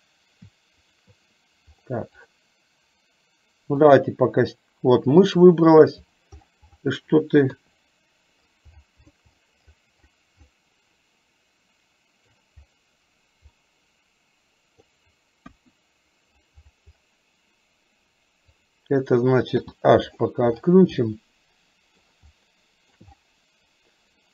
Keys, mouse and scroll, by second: 0.9 shift+click, 2.4 click, 4.0 click, 7.6 KP_3, 11.0-12.4 middle drag, 13.6-14.9 middle drag, 15.6 KP_1, 18.6 click, 19.6 h, 21.0-22.0 shift+middle drag, 22.5-23.0 shift+middle drag.